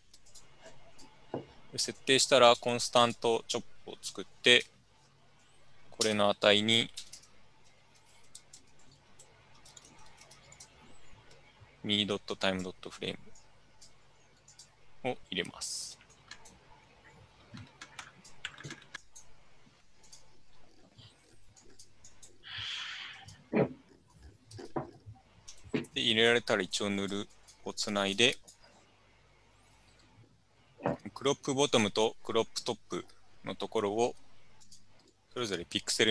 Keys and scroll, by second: 6.1-10.7 typing, 24.6 Tab, 25.6-26.4 typing.